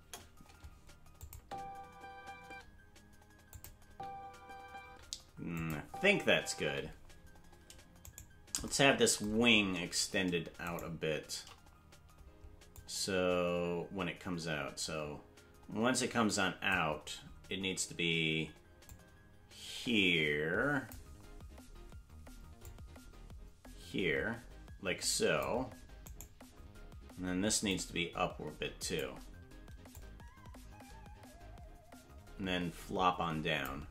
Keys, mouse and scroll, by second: 0.0 KP_0, 1.2-2.6 drag, 1.4 space, 2.6 space, 3.5 click, 3.8 space, 4.9 space, 5.6 click, 5.8 space, 8.3 right click, 8.3 space, 9.7 scroll down 1, 10.9 shift+right click, 12.8-16.7 drag, 18.9-20.9 drag, 22.6-25.4 drag, 26.2 right click, 27.7-29.0 drag, 30.0-33.7 drag.